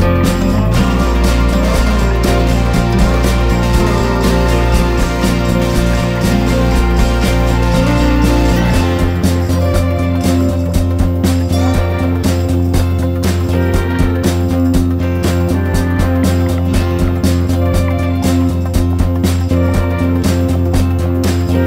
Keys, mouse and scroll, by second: 0.4 click, 0.8 ctrl+shift+g, 1.5 click, 6.0 F4, 6.4 click, 8.3 F4, 8.6 click, 10.2 F4, 10.5 click, 12.6 F4, 12.7 click, 16.3 F4, 17.0 click, 18.9 F4, 19.2 click, 21.3 F4.